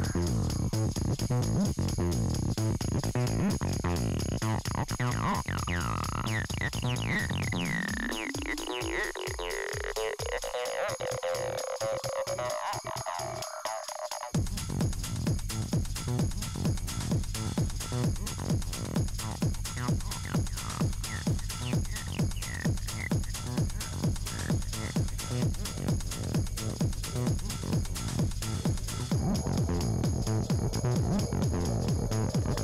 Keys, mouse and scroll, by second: 2.0 scroll down 3, 2.3 click, 7.3-9.4 drag, 9.8 scroll up 4, 10.3-11.9 middle drag, 11.9 scroll down 2, 12.0-12.9 middle drag, 12.9-13.4 scroll up 4, 14.3 scroll down 3, 14.5-16.0 middle drag, 16.0 click, 17.4-19.0 drag, 21.2-22.7 scroll up 1, 22.7 scroll up 1, 22.9 click, 23.1 click, 23.9 t, 24.2-24.8 F7, 25.0-26.2 F7, 26.4 F7, 26.6-27.6 F7, 28.0 F7, 28.0 scroll down 1, 28.2 F7, 28.8 F7, 29.0-29.4 middle drag, 29.4 F7, 29.6 F7, 30.0-30.6 F7, 30.8 n, 30.9 n, 31.2 drag, 32.1-32.6 scroll down 7.